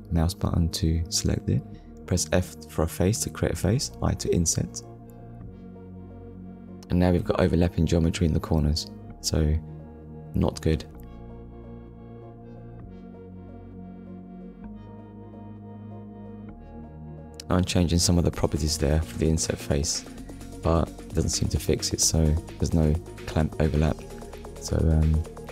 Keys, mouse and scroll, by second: 1.6 middle click, 10.4 click, 14.0 click, 14.7 click, 16.7 middle click, 17.5 scroll up 1, 18.6-19.0 scroll up 1, 19.7 click.